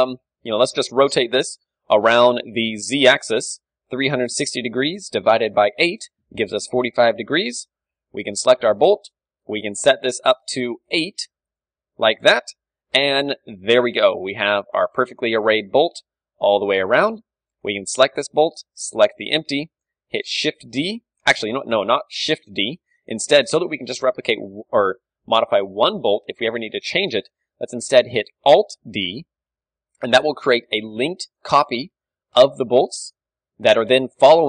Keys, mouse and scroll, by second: 2.9-5.8 drag, 8.0-9.9 right drag, 9.9-13.7 drag, 12.0 z, 12.9-15.7 middle drag, 12.9 z, 13.9 z, 15.7 a, 16.1-18.0 middle drag, 16.9 KP_1, 17.2 z, 18.0 right click, 20.7 shift+d, 22.2 ctrl+z, 22.7 g, 23.0 click, 23.8-25.1 right drag, 26.6-28.4 middle drag, 28.9 alt+d, 31.5-33.2 drag, 32.5 g, 33.2 middle click.